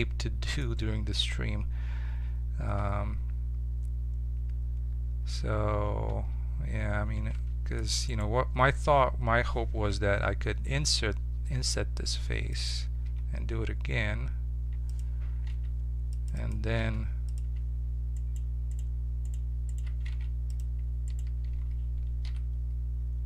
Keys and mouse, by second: 2.7 Tab, 6.0 Tab, 7.3 ctrl+Tab, 8.0-9.2 drag, 9.9 i, 13.0 i, 15.4 ctrl+Tab, 16.3-20.0 drag, 16.8 ctrl+Tab, 20.1 ctrl+Tab, 22.2 e.